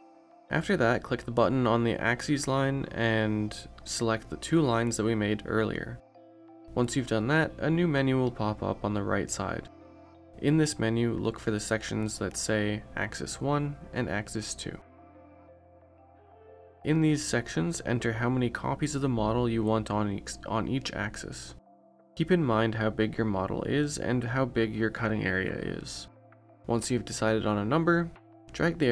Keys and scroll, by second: 25.2 5, 27.1 5.